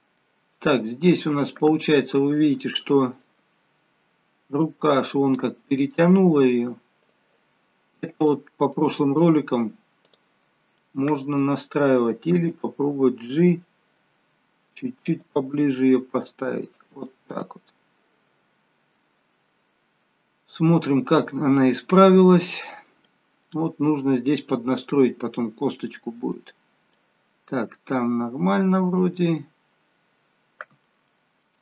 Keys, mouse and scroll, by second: 0.2 middle click, 1.7 scroll down 2, 2.8 shift+middle click, 4.1-4.8 scroll down 1, 4.8 middle click, 7.1 click, 8.2 click, 8.8 middle click, 10.0 click, 10.8 middle click, 12.4 g, 15.5 middle click, 17.6 middle click, 19.3-20.4 scroll down 1, 20.7 click, 21.2 middle click, 22.6-23.1 scroll up 2, 23.1 middle click, 25.6 middle click, 28.9 middle click, 31.4 shift+middle click.